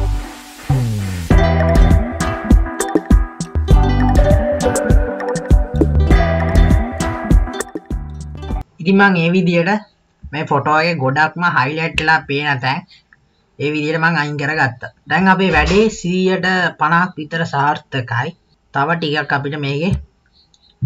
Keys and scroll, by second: 0.4 ctrl+z, 1.0 [, 3.5-6.1 typing, 5.9 ctrl+z.